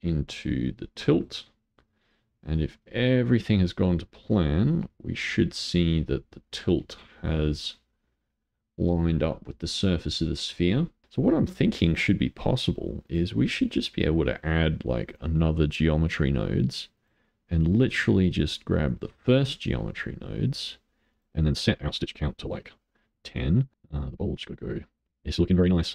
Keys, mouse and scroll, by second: 0.1 click, 2.1-2.7 scroll down 3, 2.7-4.9 middle drag, 4.9-5.5 scroll up 1, 5.5-8.6 middle drag, 9.3-11.0 middle drag, 11.8 click, 13.0-16.1 drag, 17.0-20.1 drag, 21.1-25.2 drag.